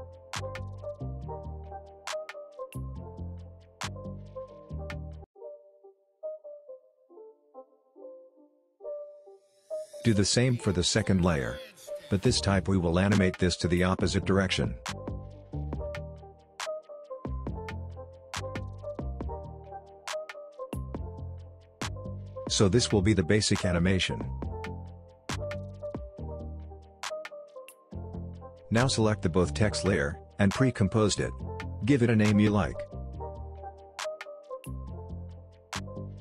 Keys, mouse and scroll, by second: 0.5-1.2 click, 1.0 space, 5.0 space, 5.2 click, 6.1 space, 8.1 space, 8.3-9.7 drag, 21.5 space, 24.0 space, 24.3-24.9 click, 24.7 space, 26.9 space, 28.8 click, 30.5 right click, 31.8 click, 33.8-36.1 typing.